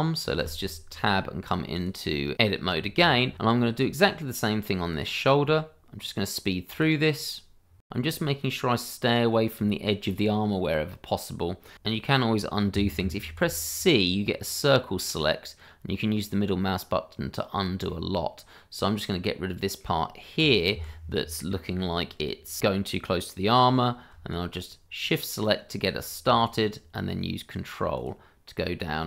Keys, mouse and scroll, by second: 0.4 Tab, 2.2 scroll up 1, 3.0 scroll up 1, 3.5 click, 3.6 scroll down 1, 3.9 click, 4.0 ctrl+z, 4.1 ctrl+click, 4.4 ctrl+z, 4.6 click, 4.7 ctrl+z, 4.8 scroll down 1, 5.0 scroll up 1, 5.2 click, 5.3 scroll down 1, 5.5 scroll up 1, 5.7 shift+middle click, 5.8 middle click, 6.0 shift+middle click, 6.2 ctrl+click, 6.3 click, 6.6 ctrl+z, 6.8 shift+middle click, 6.9 click, 7.1 middle click, 7.2 click, 7.4 scroll up 1, 7.5 click, 7.6 scroll down 1, 7.7 middle click, 7.7 shift+middle click, 8.1 scroll up 1, 8.4 middle click, 9.7 shift+middle click, 9.7 middle click, 9.8 shift+middle click, 13.3 c, 14.4 middle click, 20.7 Escape, 25.0 click, 26.4 ctrl+click, 26.5 click, 28.0 click.